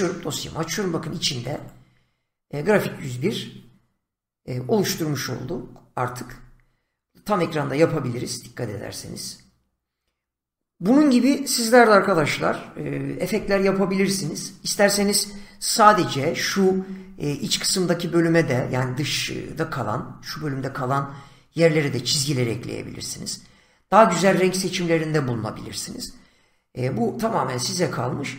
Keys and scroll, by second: 6.1 Return, 15.7 <.